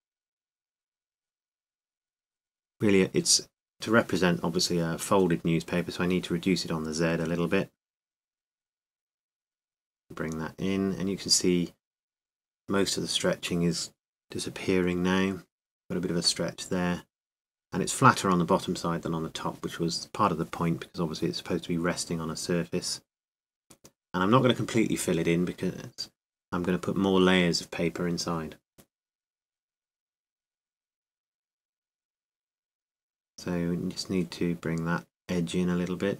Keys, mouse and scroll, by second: 21.3 a, 21.7 a, 23.0 s.